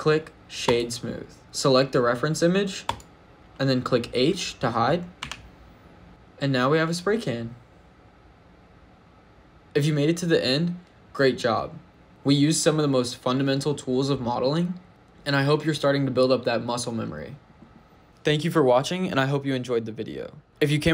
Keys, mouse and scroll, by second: 1.4 middle click, 2.7 click, 5.0 h, 6.1 shift+middle click.